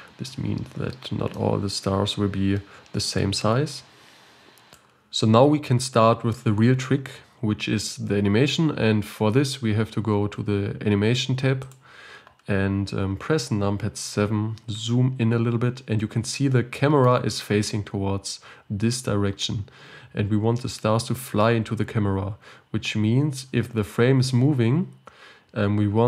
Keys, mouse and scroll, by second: 0.7-1.3 scroll up 8, 1.3-4.6 middle drag, 4.8 click, 11.7 click, 12.7-14.0 scroll up 2, 14.0 KP_7, 15.4-16.0 scroll up 4, 16.0-16.7 scroll up 4, 16.7 scroll up 1, 16.8-22.6 shift+middle drag, 22.6-23.5 scroll down 8.